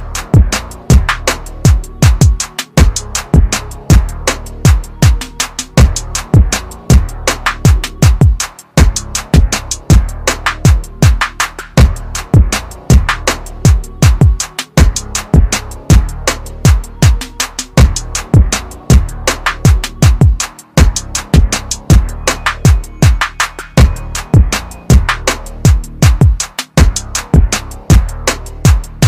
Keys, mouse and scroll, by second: 4.7 space, 4.8 click, 5.2 space, 5.6 click, 5.7 space, 7.5 typing, 8.2 click, 19.4-19.7 scroll down 1, 20.7 scroll up 1, 22.4 ctrl+KP_Subtract, 24.3-24.6 scroll up 1, 27.7 ctrl+KP_Add.